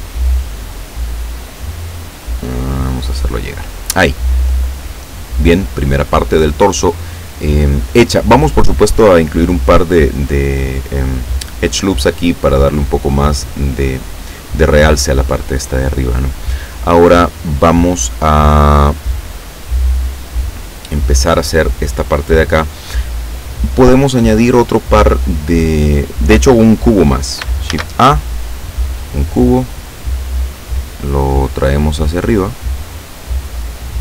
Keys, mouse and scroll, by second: 2.4 click, 27.7 shift+a, 29.1 click, 31.1 scroll down 2, 32.2-34.0 drag.